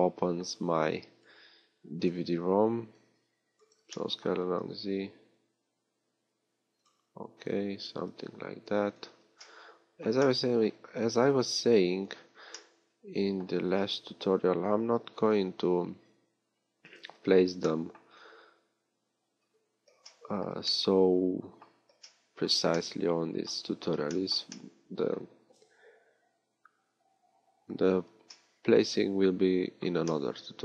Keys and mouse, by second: 0.0 click, 4.1 click, 4.4 s, 15.2-17.4 middle drag, 15.2 s, 17.4-19.0 drag, 19.0-22.1 middle drag.